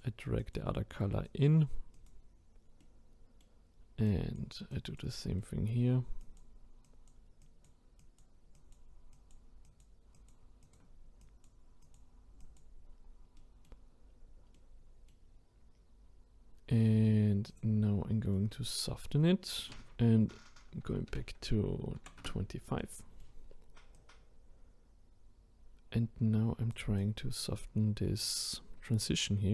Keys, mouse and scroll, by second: 2.8-4.1 middle drag, 4.1-5.4 drag, 5.4-6.2 middle drag, 6.2-12.9 drag, 12.9-13.4 scroll down 1, 13.4-14.1 middle drag, 14.1-14.5 scroll up 2, 14.5-17.5 middle drag, 17.5-18.3 drag, 18.3-19.6 middle drag, 19.6-22.6 drag, 22.8-23.9 middle drag, 23.9-26.9 drag.